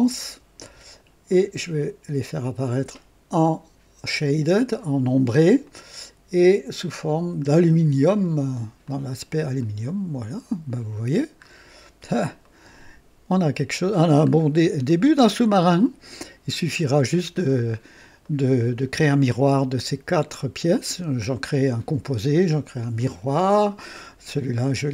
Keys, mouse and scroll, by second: 0.0 ctrl+d, 1.3 click, 2.2 click, 5.6 click, 6.9 click, 8.2 click, 8.8 click, 9.6-11.1 drag, 11.4-12.1 scroll up 2, 12.4 right click, 14.2-14.6 scroll down 2, 14.8-16.7 drag, 17.4-17.7 scroll down 1, 17.7 scroll up 1, 18.2 right click.